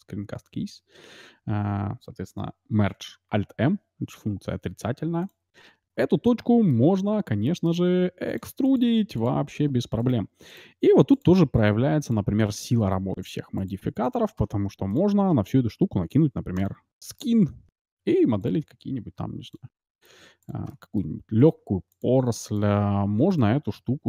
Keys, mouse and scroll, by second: 0.3 n, 3.2 alt+m, 5.5 middle click, 6.2 middle click, 7.9 e, 8.4 e, 8.8 e, 9.0 middle click, 9.9-14.7 right drag, 10.2 e, 10.8 e, 11.7 e, 12.5-14.1 middle drag, 13.3 e, 13.7 e, 14.9-16.6 drag, 17.3-18.8 middle drag, 18.0 r, 19.1 e, 19.9-23.1 right drag, 20.1 e, 20.6-22.3 middle drag, 21.5 e, 22.1 e, 23.0 e.